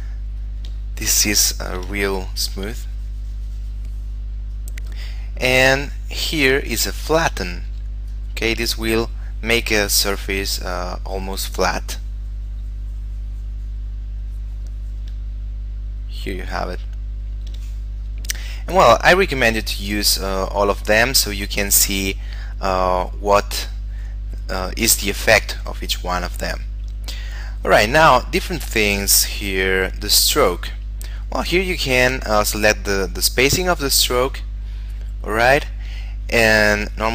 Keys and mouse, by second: 1.2 shift+middle click, 2.4 click, 4.7 click, 6.6 shift+middle click, 7.9 f, 8.3 click, 15.4 shift+middle click, 18.2 click, 27.5 click, 33.6 click, 37.0 click.